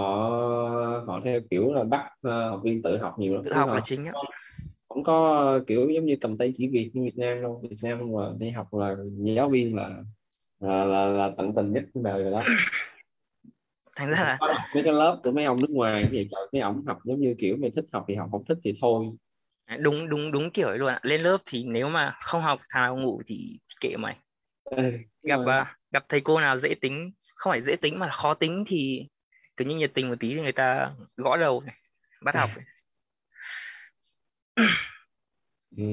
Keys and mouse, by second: 16.4 click, 22.3 click, 26.7 click, 32.9 click.